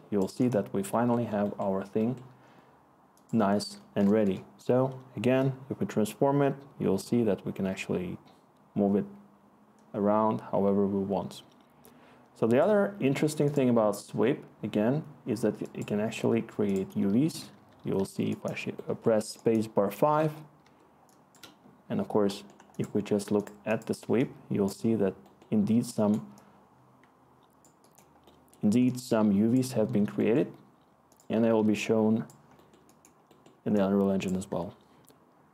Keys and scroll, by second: 4.2 Return, 17.5 5, 20.1 2, 20.6 1.